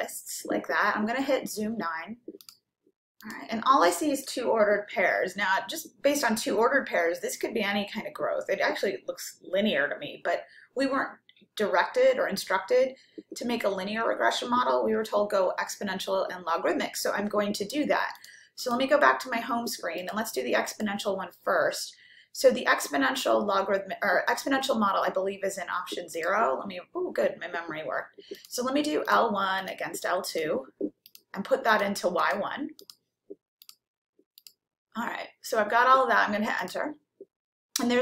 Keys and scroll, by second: 3.3 9, 20.8 Right, 26.2 0, 29.4 1, 29.9 ,, 31.3 2, 32.0 ,, 32.8 Right, 33.7 Return, 34.4 Return, 36.6 Return.